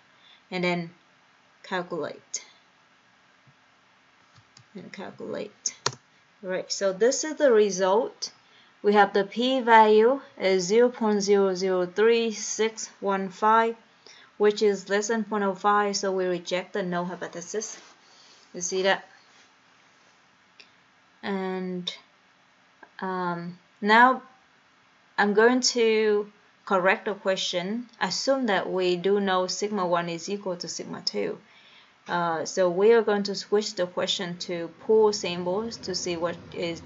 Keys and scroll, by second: 2.4 Return, 3.7 Return, 5.2 Down, 5.2 Down, 6.2 Return, 34.2 Right, 35.1 Right.